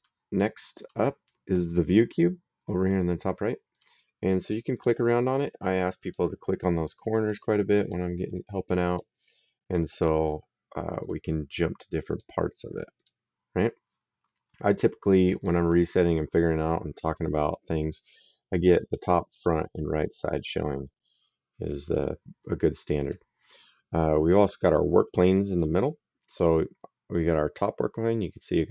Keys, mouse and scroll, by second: 2.4 middle click, 3.5 click, 5.9 click, 7.7 click, 8.7 click, 10.8 click, 11.9 click, 15.2 click, 17.0 middle click, 21.4 middle click, 22.8 click, 23.8 middle click, 25.1 middle click, 26.1 click.